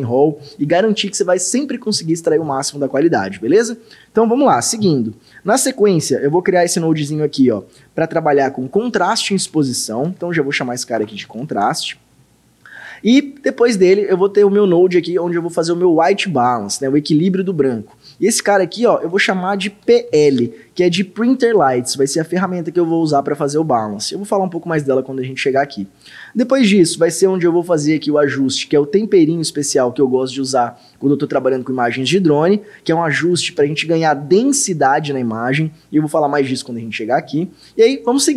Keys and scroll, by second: 9.1-12.0 typing, 19.6-20.6 typing, 33.3 d, 33.5 Return.